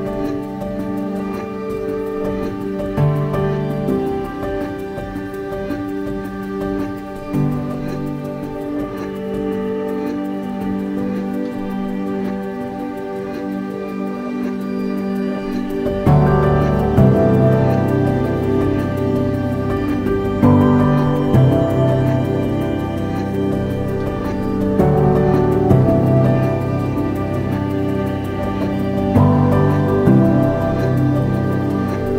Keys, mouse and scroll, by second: 1.3 Tab, 3.2 Tab, 3.2-4.4 middle drag, 4.4 click, 7.2 g, 11.2 click, 12.5 Tab, 13.0 scroll up 1, 13.9 click, 15.8 Tab, 17.6 g, 20.0 click, 23.9 g, 26.1 click, 26.2 Tab, 28.7 g, 31.4 click, 31.9 Tab.